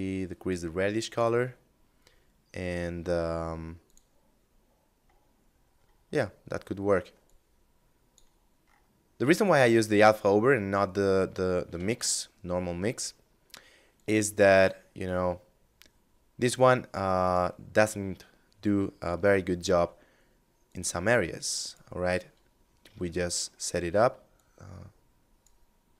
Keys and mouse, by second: 2.8 click, 4.5 middle click, 6.3 click, 10.8 shift+a, 13.0 click, 16.4 click, 19.8 click, 21.3 middle click, 23.5 click, 25.8 ctrl+shift+click.